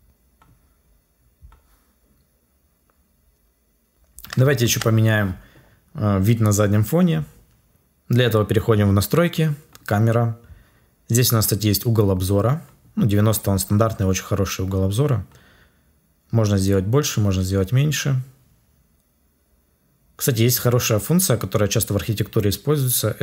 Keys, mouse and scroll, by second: 4.5 ctrl+s.